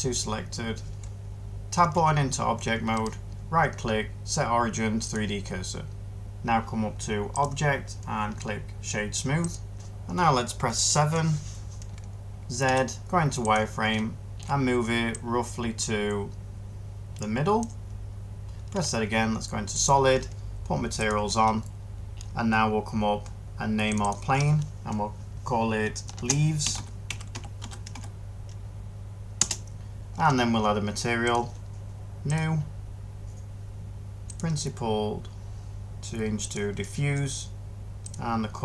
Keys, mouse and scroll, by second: 1.7 Tab, 5.0 Tab, 10.9 7, 12.5 z, 18.6 z, 26.6-27.8 typing, 29.3 Return.